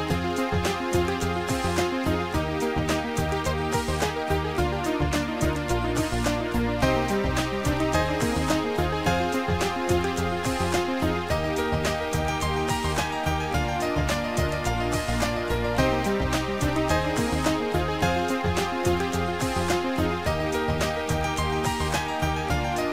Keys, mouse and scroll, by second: 2.0 click, 2.8 click, 4.7 click, 9.1 click, 11.9 ctrl+click, 13.7 click, 17.6 click, 19.3 click, 20.4 click, 21.9 click.